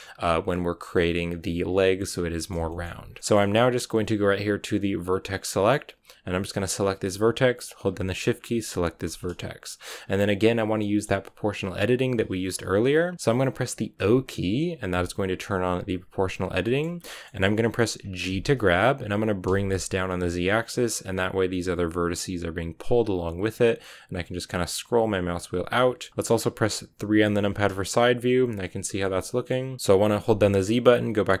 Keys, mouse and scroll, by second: 3.0 scroll up 1, 3.1-4.9 middle drag, 4.9 click, 5.4-6.7 middle drag, 6.7-9.0 right drag, 9.0 scroll down 3, 9.2-13.9 middle drag, 13.9 o, 16.5 shift+middle click, 16.8-17.9 scroll up 2, 17.0 middle click, 17.9-18.2 scroll down 1, 18.2 g, 27.0 KP_3, 27.9-28.9 scroll down 1, 28.9-31.4 shift+middle drag.